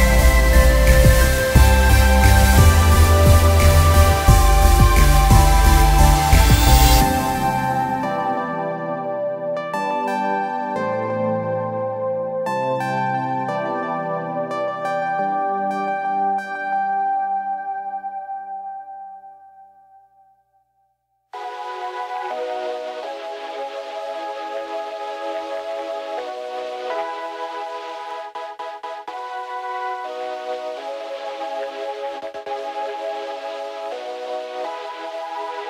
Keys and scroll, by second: 6.1 Delete, 6.8 Return, 27.8 ctrl+KP_Subtract, 27.9 ctrl+KP_Subtract, 28.1 ctrl+KP_Subtract, 29.7 space.